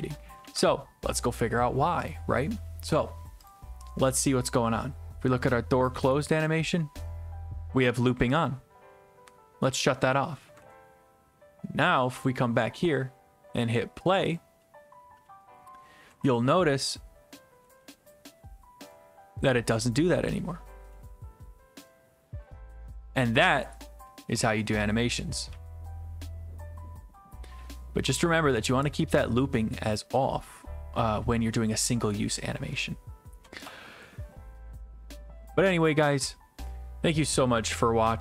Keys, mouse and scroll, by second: 0.4 alt+F4, 2.1-4.5 drag, 8.5 click, 10.6 ctrl+s, 12.3 click, 14.4 click, 16.2-22.1 typing, 23.3 s, 24.3 w, 25.5-28.0 typing.